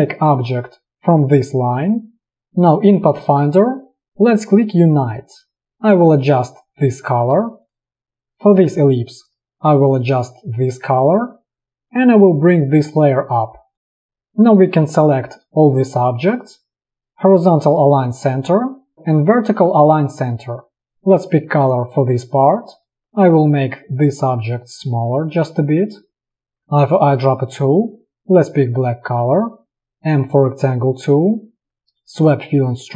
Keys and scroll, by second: 5.6 space, 8.1 v, 9.7 v, 12.0 ctrl+], 21.0 space, 26.6 i, 30.4 m.